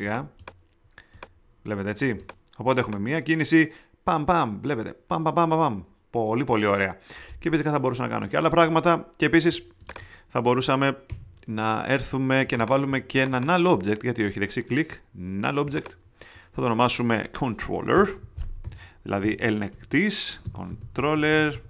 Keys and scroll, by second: 11.0 θ, 17.9 Return, 18.1-21.6 typing.